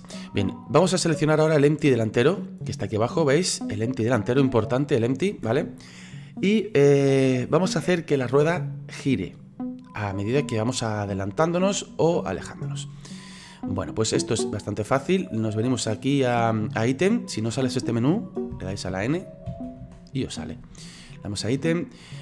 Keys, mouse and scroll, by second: 1.9 right click, 3.1-3.6 scroll up 4, 3.6-15.0 middle drag, 15.0 click, 15.9 click, 18.5 n, 18.9 n, 19.5 n, 19.8 n.